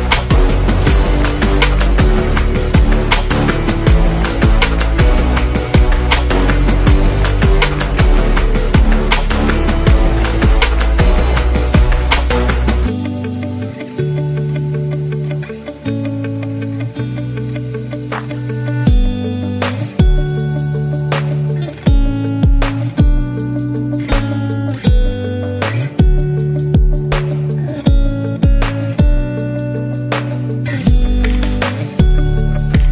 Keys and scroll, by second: 3.9 super+d, 4.2 super+d, 5.9 super+-, 7.1 super+d, 13.0 space, 14.2 super+3, 18.1 super+3, 20.6 super+z, 21.1 super+z, 22.9 super+3.